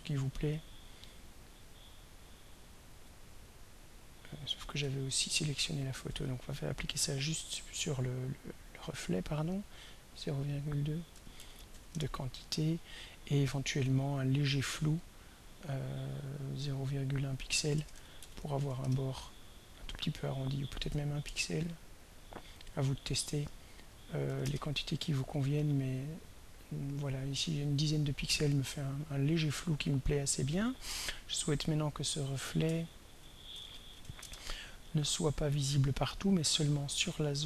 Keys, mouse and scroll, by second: 3.4 click, 5.3 ctrl+y, 6.6 click, 9.5 click, 10.3 click, 10.9-12.2 typing, 14.9 click, 15.5 click, 16.6-19.1 typing, 20.1 click, 20.8 1, 21.3 Return, 22.6 click, 23.8 1, 24.3 0, 24.4 Return, 28.3 click, 29.9 click, 31.8 click, 32.9 ctrl+a, 33.3-34.5 typing.